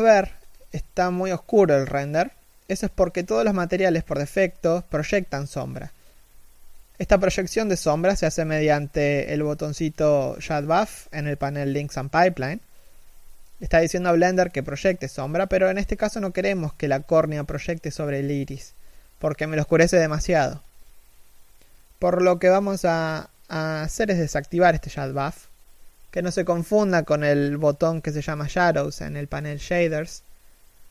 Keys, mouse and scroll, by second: 6.8 3, 7.0 z, 7.1-7.5 scroll up 1, 19.6 1, 19.7 scroll down 1, 19.8 a, 21.3-24.3 typing, 23.5 middle click, 26.7 g, 29.9 right click.